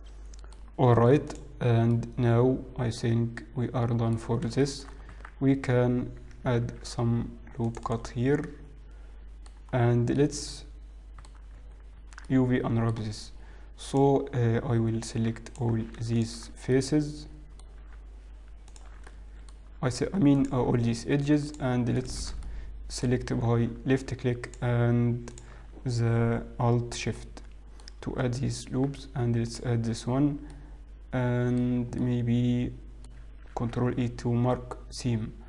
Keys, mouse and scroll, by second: 0.9 middle click, 0.9-1.3 scroll down 1, 1.4 click, 3.8 middle click, 4.2 scroll up 3, 4.7 shift+middle click, 5.8 Tab, 5.8-6.2 scroll down 3, 6.8 ctrl+r, 10.0 middle click, 10.0-10.4 scroll down 2, 11.9 Tab, 11.9 middle click, 12.4 Tab, 12.4 middle click, 14.0 click, 14.8-15.4 scroll up 4, 15.6 alt+click, 16.2 alt+shift+click, 16.8 middle click, 18.8 alt+shift+click, 19.2 middle click, 20.4 alt+shift+click, 22.5 alt+shift+click, 22.7 middle click, 24.5 alt+shift+click, 25.4 alt+shift+click, 27.2 middle click, 30.8 alt+shift+click, 30.8 middle click, 30.8-31.4 scroll down 2, 32.1 middle click, 33.6 ctrl+e.